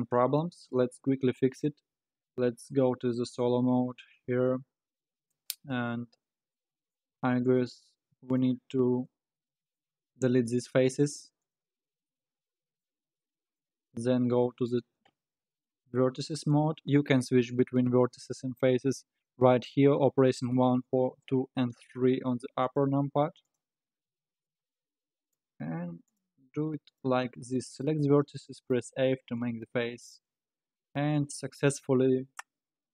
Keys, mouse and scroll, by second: 0.1 click, 3.5 KP_Divide, 4.5-5.6 middle drag, 5.6 Tab, 6.1-6.6 scroll down 3, 6.6 middle click, 7.1 3, 7.5 click, 8.3 shift+click, 9.3 middle click, 10.1 x, 12.1-13.9 middle drag, 13.9 2, 14.4 middle click, 14.9-15.4 scroll up 4, 15.4 1, 15.5-16.2 scroll down 2, 16.2 click, 22.6 shift+click, 23.4 shift+click, 24.0 f, 24.4-26.1 middle drag, 26.1 click, 26.9 shift+click, 27.7 shift+click, 28.4 middle click, 28.9 f, 29.6-32.7 middle drag.